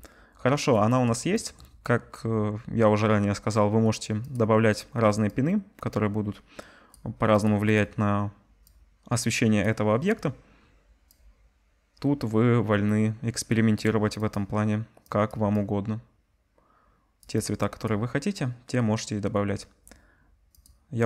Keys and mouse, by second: 0.0 space, 7.4 click, 7.7-11.2 drag, 14.3-20.5 drag.